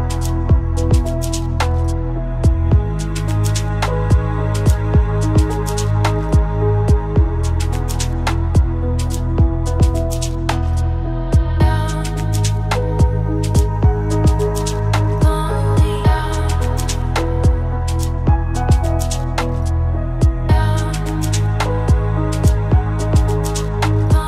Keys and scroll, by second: 0.2 ctrl+space, 5.8 ctrl+Return, 7.2 ctrl+z, 8.4 ctrl+shift+Return, 9.7 ctrl+z, 10.5 ctrl+alt+Return, 12.7 ctrl+space.